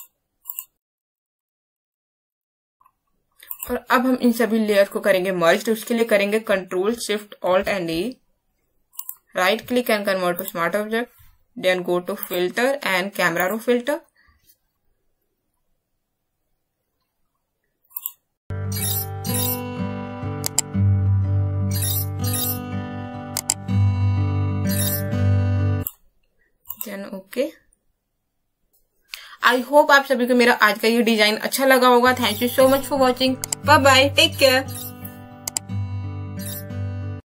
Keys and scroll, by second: 7.5 ctrl+alt+shift+space, 7.7 ctrl+alt+shift+e.